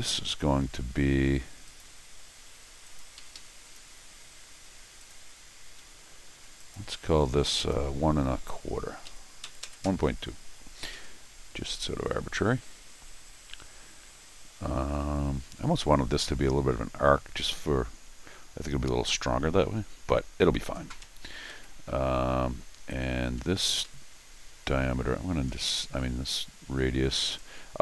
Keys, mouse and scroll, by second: 0.7 c, 1.7 click, 2.9 click, 3.2 Escape, 3.4 Escape, 3.6 click, 5.0 click, 5.8 Escape, 6.3 d, 6.6 click, 7.6 click, 10.9 Escape, 21.0 Escape, 21.2 Escape, 23.4 Escape, 23.8 Escape, 25.5 scroll down 2, 26.3 Escape, 27.2 click.